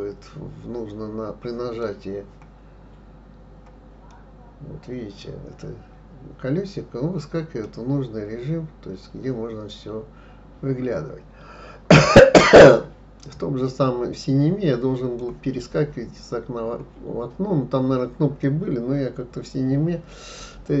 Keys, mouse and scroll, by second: 2.3-3.2 scroll down 1, 3.2-4.1 scroll up 2, 4.1-7.1 middle drag, 7.7-8.7 scroll down 1, 8.7-9.4 scroll up 1, 9.4-11.0 scroll up 1, 11.0-11.7 scroll up 1, 13.3-16.3 middle drag, 17.5-18.4 scroll up 1, 18.4-20.8 middle drag.